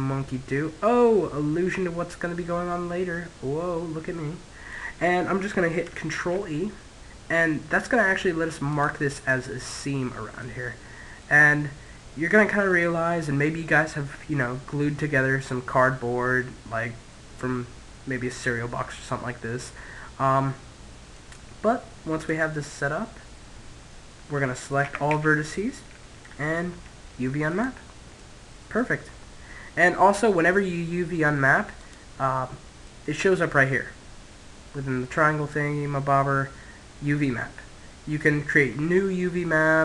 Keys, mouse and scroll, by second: 0.0 middle click, 5.6 ctrl+e, 8.7-10.2 middle drag, 10.6-12.2 middle drag, 16.7-18.5 middle drag, 21.5 click, 24.2 a, 24.4 a, 25.8 u, 27.5-29.2 middle drag, 31.1 click, 32.9-34.1 middle drag.